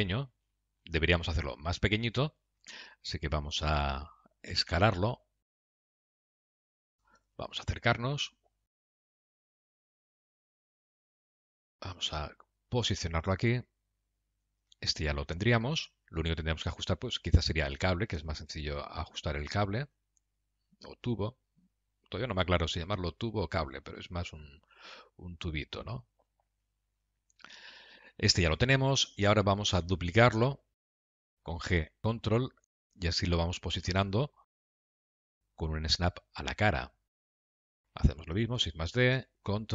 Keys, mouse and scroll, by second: 0.7-1.2 scroll down 8, 1.4 middle click, 2.7-3.8 scroll down 1, 5.0 s, 7.5 KP_Decimal, 8.2-8.9 scroll down 3, 8.6 middle click, 15.2-15.8 scroll down 3, 15.6 middle click, 17.4 click, 18.4 Tab, 20.1 click, 20.5 g, 23.0 scroll down 4, 23.4 middle click, 25.0 click, 25.2 g, 26.9 scroll down 1, 27.3 middle click, 28.4 Tab, 28.9 click, 30.3 shift+d, 34.6 middle click, 35.4 g, 37.3 middle click, 38.6 shift+d.